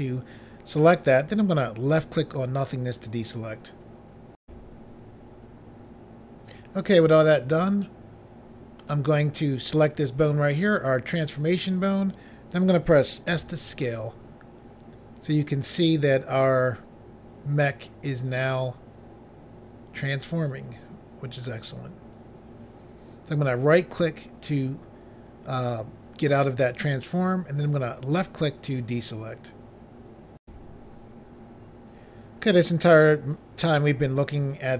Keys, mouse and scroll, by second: 2.0 click, 4.4 Pause, 7.3 middle click, 9.6 click, 9.7 click, 13.3 s, 23.3 right click, 23.5 right click, 28.0 click, 28.1 click, 30.4 Pause.